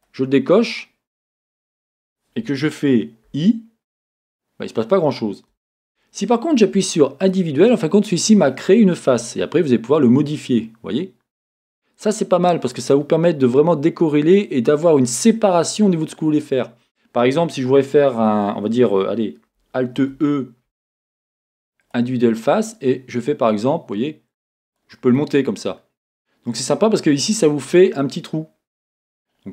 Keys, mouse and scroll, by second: 0.0-25.7 drag, 14.0 scroll up 1, 15.5-18.3 scroll up 1, 25.7-29.5 middle drag, 27.5-28.0 scroll up 2.